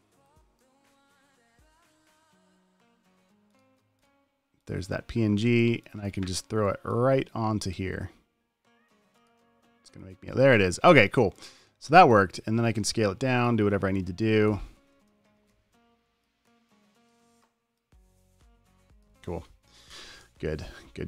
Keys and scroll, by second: 15.5 super+z, 20.4 Return.